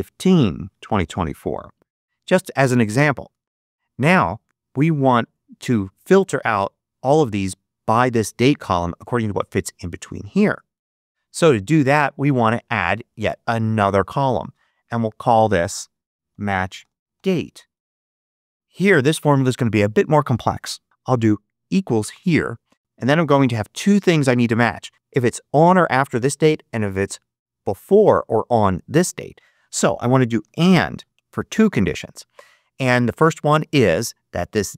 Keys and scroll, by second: 0.0-1.6 typing, 16.0-17.8 typing, 21.0 =, 30.0-31.4 typing.